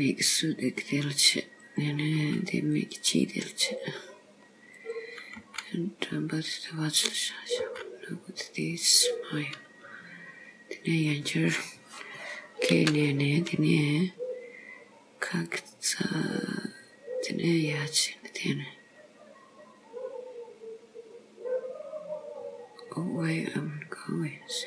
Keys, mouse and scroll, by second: 1.6 click, 2.2 g, 3.8 click, 4.9 click, 5.5 g, 7.2 click, 7.8 g, 11.0 click, 12.8 k.